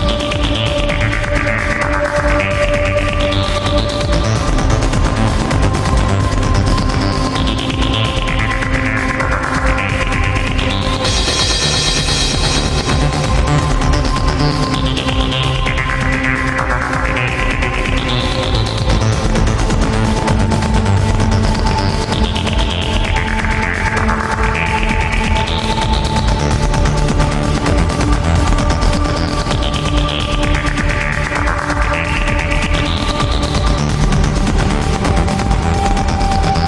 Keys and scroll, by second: 0.4 ctrl+z, 2.3 alt+space, 3.0 alt+space, 28.4 alt+space, 29.4 alt+space, 30.8 alt+space, 33.1 alt+space, 34.8 alt+space, 36.4 alt+space.